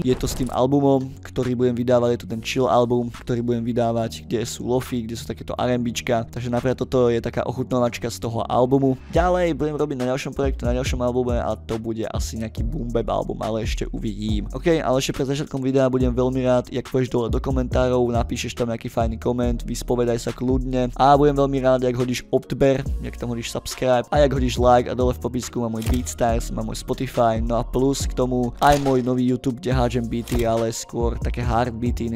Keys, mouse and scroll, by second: 0.7 click.